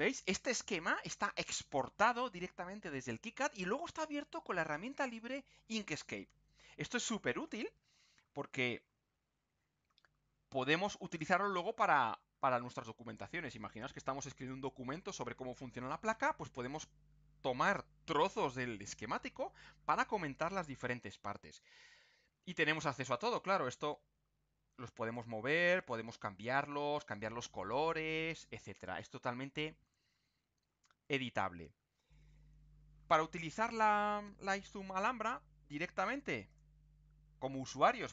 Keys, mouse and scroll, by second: 8.0-8.8 ctrl+scroll up 2, 9.6 ctrl+scroll down 2, 11.1-12.9 drag, 21.3 ctrl+scroll up 2, 22.2 ctrl+scroll up 2, 23.0 click, 23.9-25.3 drag, 25.8 click, 26.5 ctrl+click, 28.8 ctrl+scroll down 2, 30.0 ctrl+scroll down 2, 30.6 ctrl+scroll down 2, 31.4 ctrl+scroll up 2, 36.5 click.